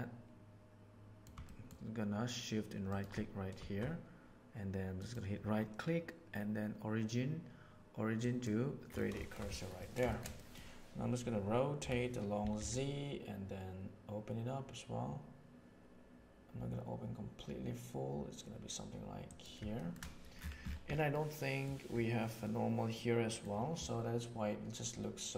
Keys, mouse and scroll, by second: 1.4-1.7 shift+middle drag, 4.9-8.4 right drag, 9.1 shift+middle drag, 9.4 ctrl+middle click, 9.7 ctrl+middle click, 10.0 shift+middle click, 10.3 middle click, 11.7 r, 19.7 shift+middle click, 21.0 middle click, 22.3 middle click, 23.2 middle click.